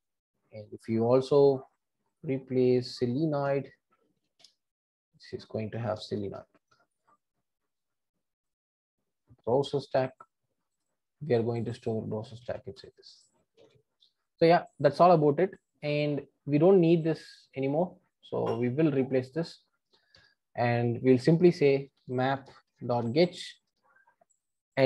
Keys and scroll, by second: 4.3 Return, 12.3 super+c, 12.6 Escape, 13.5 super+v, 23.6 Return.